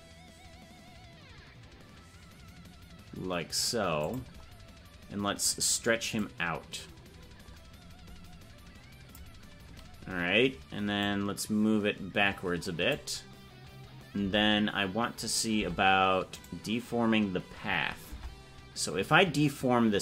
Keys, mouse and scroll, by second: 6.1-9.2 drag, 11.0-12.9 drag, 14.2 Tab, 16.4-18.1 right drag, 18.1 Tab.